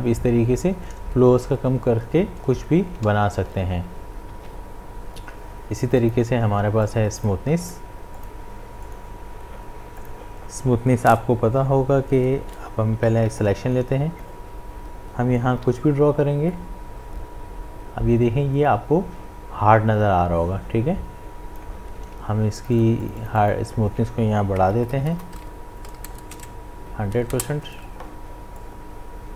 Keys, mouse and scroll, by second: 3.1 ctrl+z, 4.3 ctrl+z, 6.0 click, 13.4-15.6 drag, 15.6 b, 16.5-22.6 drag, 28.6-29.3 drag.